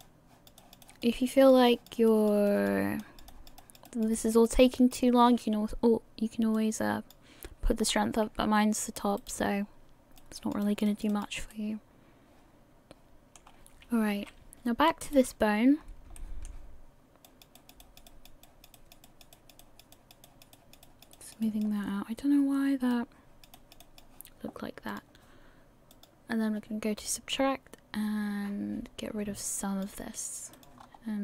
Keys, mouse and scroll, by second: 0.6 click, 0.8 click, 1.7 click, 2.1 click, 3.3 click, 3.6 click, 4.1 click, 4.5 click, 9.6 scroll down 4, 10.2 click, 10.6 click, 11.5 middle click, 13.5-14.2 scroll up 1, 14.2-14.6 scroll up 1, 14.2 KP_1, 15.4 right click, 15.8 scroll up 3, 16.2 shift+middle click, 17.2 click, 17.6 click, 18.1 click, 18.4 click, 19.0 click, 19.9 click, 20.2 click, 21.1 click, 21.4 click, 21.9 scroll down 1, 22.4 scroll down 2, 22.9 click, 23.5 click, 24.9 click, 25.9 click, 30.5 click, 30.9 scroll up 3.